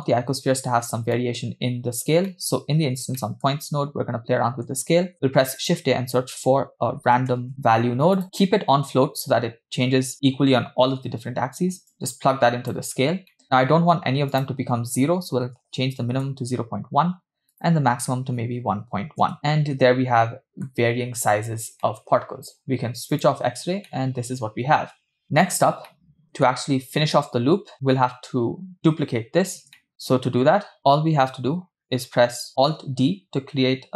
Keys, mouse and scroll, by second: 0.8-1.1 scroll down 2, 1.2 middle click, 2.3 middle click, 3.2 middle click, 5.1 shift+a, 8.2 middle click, 8.2 click, 8.2-8.9 scroll up 3, 11.9-13.2 drag, 13.3 middle click, 13.7-14.3 scroll up 3, 14.4-16.8 drag, 17.6-19.4 drag, 19.4-20.7 middle drag, 21.5-22.0 scroll down 2, 22.0 middle click, 23.1 click, 24.0-25.1 middle drag, 25.4-25.9 scroll down 2, 26.0-26.5 middle drag, 26.9-27.7 scroll down 1, 29.4-29.7 scroll down 2, 29.7 shift+middle click, 30.8 click, 33.1 alt+d.